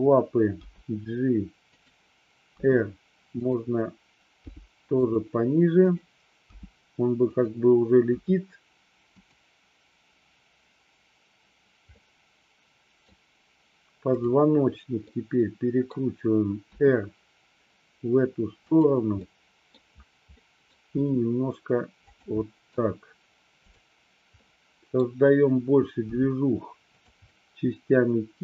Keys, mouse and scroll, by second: 0.6 g, 1.8 click, 2.6 r, 3.5 click, 4.5 g, 5.1 drag, 6.6 g, 7.5 click, 8.2 r, 9.2 click, 12.1-13.1 middle drag, 15.1-16.0 middle drag, 16.8 r, 18.7 click, 19.3-19.7 middle drag, 20.5 middle click, 21.0 r, 22.1 click, 22.6 middle click, 24.5-25.1 middle drag, 26.2 g, 27.0 click, 27.5-28.4 middle drag.